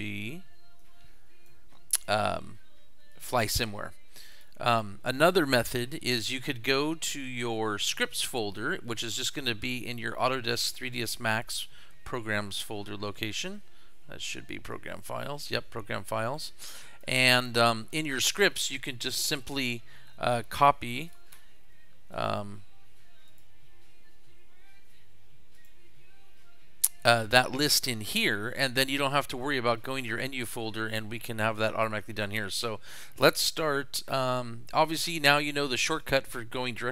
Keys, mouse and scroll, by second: 0.8 click, 3.2 click, 4.3 click, 8.0 click, 12.5 click, 14.7-16.4 drag, 16.8 click, 19.5 click, 20.3 ctrl+c, 21.0 click, 21.3 ctrl+v, 22.1 click, 23.3 click, 25.5 right click, 35.9 click.